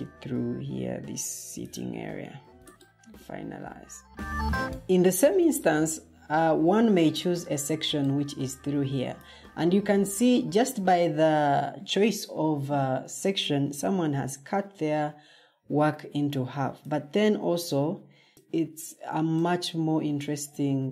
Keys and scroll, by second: 6.0 scroll, 6.9 scroll, 10.0 scroll.